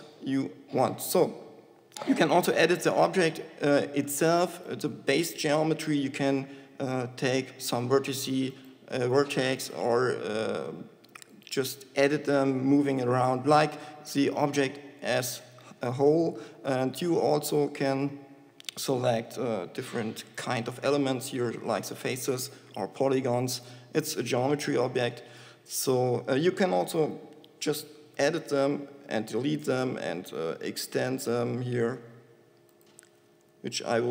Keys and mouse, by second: 2.4 Tab, 6.6 g, 10.1 g, 15.1 Tab, 15.9 g, 17.3 click, 17.6 Tab, 22.4 g, 24.4 Tab, 27.4 Tab, 27.9 Delete, 33.4 e.